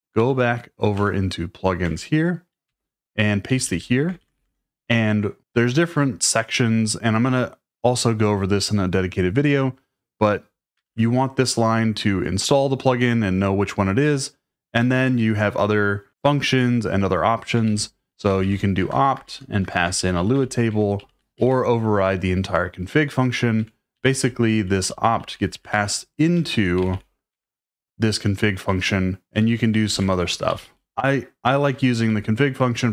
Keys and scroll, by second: 0.2 k, 0.9 Return, 1.8 Return, 2.7-4.8 typing, 10.8 shift+v, 14.7 Escape, 14.9 j, 17.6-20.2 typing, 23.6 Escape, 23.9-24.5 typing, 26.1-27.4 typing, 29.1-32.0 typing.